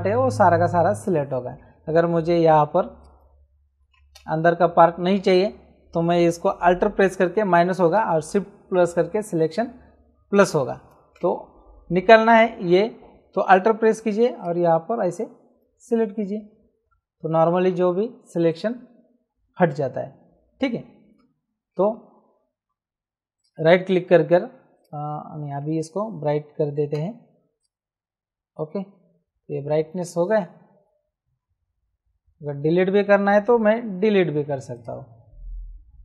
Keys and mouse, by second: 2.0 m, 3.0 shift+click, 4.1 ctrl+z, 14.3 click, 23.3 right click, 24.7 click, 26.7 ctrl+m, 27.6 click, 29.9 Return, 29.9 KP_Enter, 33.6 w, 34.7 click.